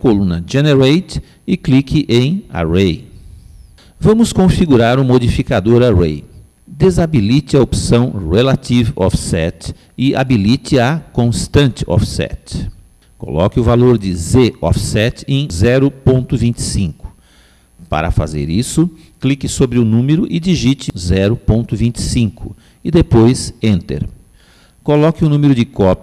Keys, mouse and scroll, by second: 9.3 click, 11.9 click, 16.9 click.